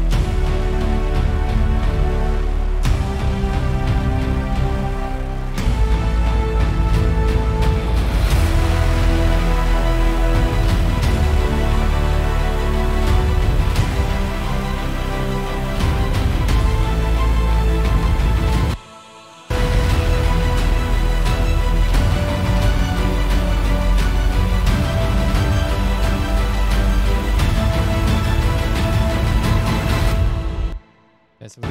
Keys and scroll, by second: 4.6 super+=, 11.2 super+=, 11.9 F8, 18.0 F7, 18.9 s, 19.7 s, 20.7 super+=, 29.3 super+=.